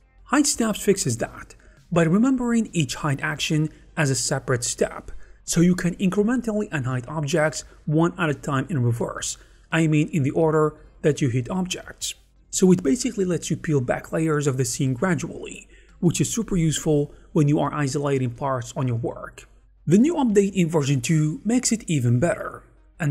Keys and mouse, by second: 1.0 middle click, 2.1 middle click, 2.6-4.4 typing, 2.7 middle click, 5.0 middle click, 7.7 click, 9.7-10.8 middle drag, 11.2 middle click, 12.2 middle click, 12.6 middle click, 13.2 alt+h, 14.1 middle click, 14.5 middle click, 15.2 middle click, 16.9 middle click, 17.1 middle click, 17.5 alt+h, 17.7 alt+h, 17.8 alt+h, 18.1 alt+h, 18.4 middle click, 19.8 middle click, 20.2 h, 20.4 click, 20.6 h, 20.8 middle click, 21.1 click, 21.1 h, 21.3 alt+middle click, 21.3 h, 21.9 alt+h, 22.1 alt+h, 22.3 alt+h, 22.6 alt+h.